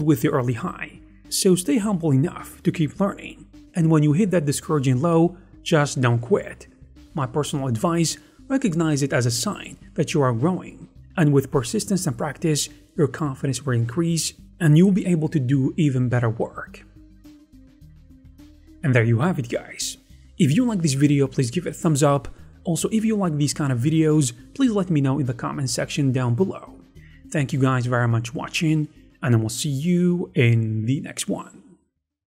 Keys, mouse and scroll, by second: 6.2 ctrl+r, 6.3 scroll up 1, 6.6 right click, 6.7 a, 7.1 shift+click, 7.3 shift+f, 7.6 shift+click, 8.1 shift+click, 8.2 shift+f, 9.3 scroll up 1, 14.1-15.9 typing, 18.0 d, 18.3 right click.